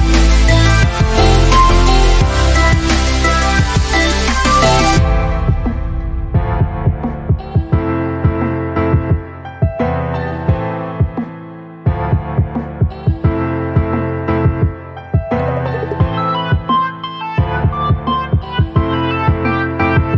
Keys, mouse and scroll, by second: 1.0 space, 1.1 ctrl+click, 7.1-11.8 drag, 17.7 Up.